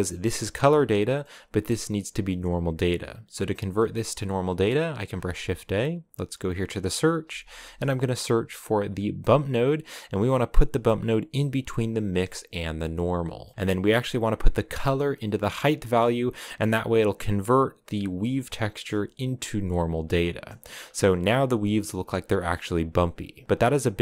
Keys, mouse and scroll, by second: 0.0-9.5 drag, 12.7 click, 13.2-14.8 middle drag, 14.8 click, 16.3-17.1 scroll up 6, 20.6 scroll up 1, 21.1 scroll up 2.